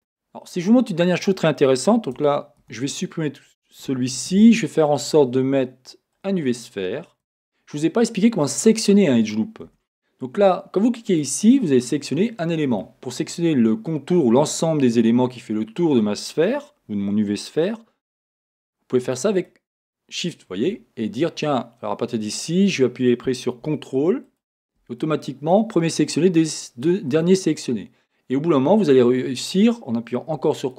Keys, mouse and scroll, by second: 2.1 Tab, 2.6-4.5 middle drag, 4.3 shift+a, 7.3 Tab, 7.3-11.1 middle drag, 9.8 a, 11.1 click, 12.3-19.3 middle drag, 19.3 shift+click, 20.2 shift+click, 21.2-24.2 middle drag, 24.2-25.3 ctrl+drag, 25.3-30.6 middle drag, 30.6 ctrl+click.